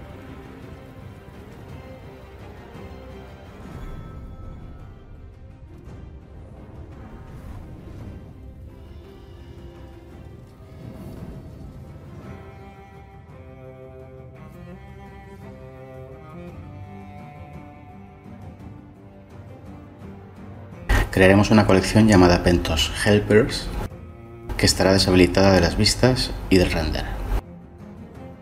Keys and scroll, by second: 13.2 ctrl+z, 18.1 ctrl+Delete, 18.9 /, 19.6 ctrl+z, 20.0 Delete, 21.1 /, 21.8 Tab, 25.9 Delete.